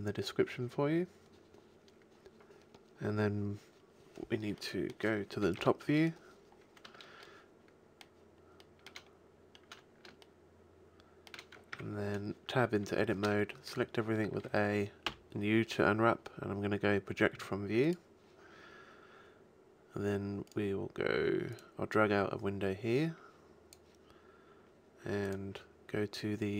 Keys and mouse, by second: 5.6 KP_7, 11.8 Tab, 13.2 a, 15.0 u, 21.4 click, 21.7 middle click.